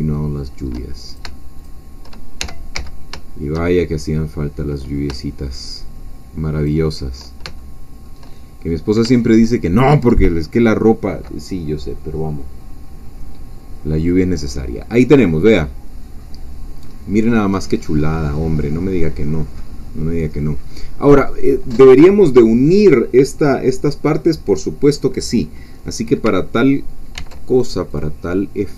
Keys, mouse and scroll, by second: 1.2 shift+click, 2.4 shift+e, 2.8 shift+z, 6.6 shift+click, 7.6-8.9 shift+middle drag, 8.6 shift+scroll down 1, 14.8 scroll down 2, 15.3-17.1 middle drag, 17.1-17.9 scroll down 2, 17.9-18.5 scroll up 2, 19.3-19.9 scroll up 2, 20.1-20.6 scroll down 2, 25.8 middle click, 25.8-26.2 scroll down 1, 27.2 ctrl+r, 27.9 click.